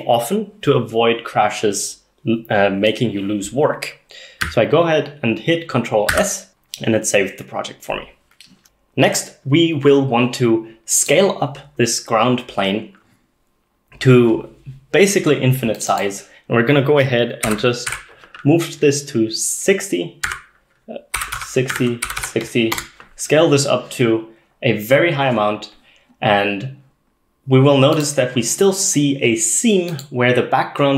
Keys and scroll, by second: 6.2 ctrl+s, 17.5-17.9 typing, 20.3 Tab, 20.3-22.2 typing, 22.8 Return.